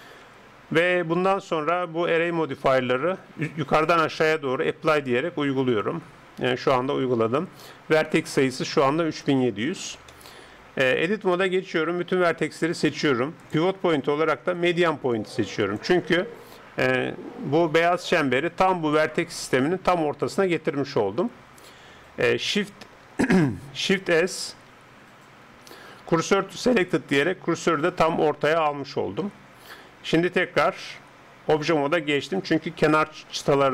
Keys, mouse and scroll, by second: 2.7-7.6 drag, 6.7 Tab, 7.1 Tab, 10.2-11.9 middle drag, 11.9 a, 12.1 a, 13.4-15.2 drag, 24.4 shift+s, 28.8-33.3 middle drag, 30.1 Tab, 33.3 click.